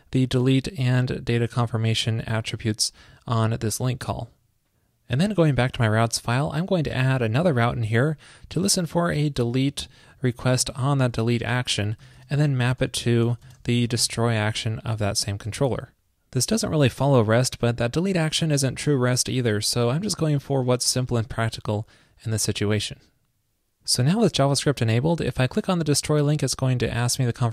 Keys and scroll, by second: 4.3 super+s, 7.7 ctrl+shift+{, 8.7 ctrl+shift+d, 9.4 alt+Left, 11.4 super+Right, 15.5 super+s.